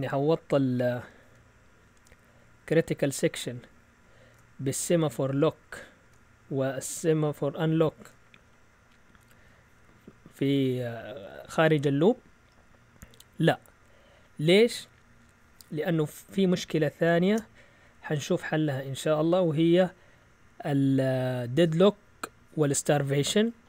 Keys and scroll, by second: 17.2 shift+super+z, 18.3 Down.